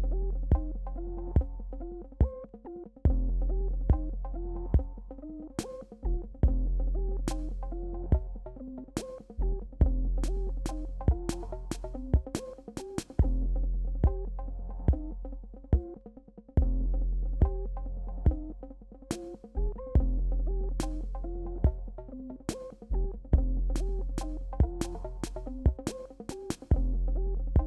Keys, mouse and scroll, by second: 0.3 click, 0.6 Return, 1.4 BackSpace, 2.3 click, 3.5 right click, 4.0 click, 4.4 Return, 5.5 scroll up 1, 5.8 click, 7.1 click, 7.9 right click, 8.5 click, 9.0 Return, 9.4 BackSpace, 10.1 alt+scroll down 1, 10.5 space, 10.5 click, 10.7 space, 11.1 click, 12.0 right click, 13.1 click, 13.6 Return, 14.2 BackSpace, 15.6 click, 15.6 click, 15.8 click, 16.0 space, 16.3-18.2 drag, 18.3 click, 18.6 right click, 19.1 click, 20.5 BackSpace, 21.8 space, 22.0 click, 22.5 right click, 23.1 click, 24.3 click, 25.0 BackSpace, 25.8 click, 27.3 right click.